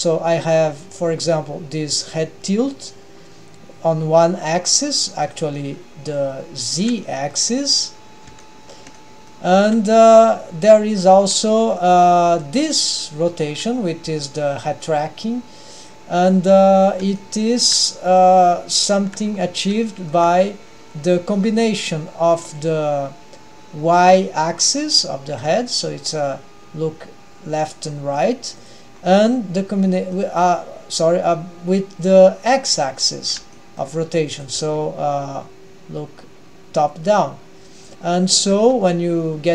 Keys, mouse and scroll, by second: 5.6-6.4 middle drag, 6.4-6.9 scroll up 3, 7.0 middle click, 8.4-8.8 shift+middle drag, 9.0-9.5 middle drag, 9.7 r, 11.3-11.9 middle drag, 12.3 g, 13.3-14.2 scroll down 3, 14.2 g, 16.2 scroll up 1, 16.3 middle click, 16.8-17.2 scroll up 2, 17.2-17.8 shift+middle drag, 17.9-18.4 middle drag, 18.7-19.2 shift+middle drag, 19.3-19.8 scroll up 2, 19.8-20.4 shift+middle drag, 20.5-20.9 scroll up 1, 21.4-22.4 scroll down 2, 22.4-22.9 scroll down 1, 25.4-27.1 scroll down 2, 25.4 g, 29.0-29.8 scroll up 3, 29.8-30.4 middle drag, 33.2-33.6 scroll down 2, 33.6-34.0 shift+middle drag, 34.4 drag, 34.7 g, 38.6 g.